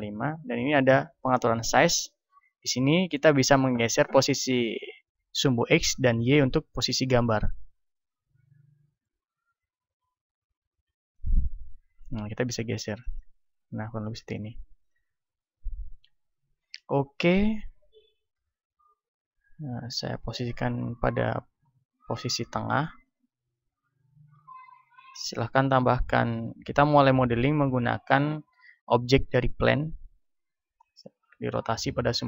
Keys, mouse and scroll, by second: 7.3-8.9 drag, 9.8-11.5 drag, 12.4-16.5 drag, 18.3 shift+s, 24.8 shift+a, 31.6 r.